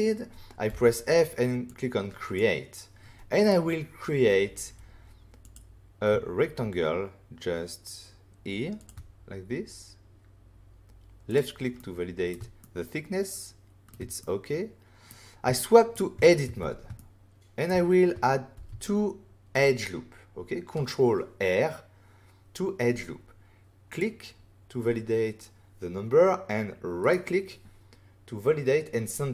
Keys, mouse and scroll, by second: 0.6 f, 1.6 click, 3.4 right click, 5.4 click, 8.7 shift+click, 8.8 shift+click, 11.2 click, 11.7 middle click, 12.6 ctrl+middle click, 14.2 middle click, 15.5 shift+middle click, 16.4 Tab, 16.9 shift+middle click, 18.5 ctrl+r, 19.1 scroll up 1, 23.8 click, 27.0 right click.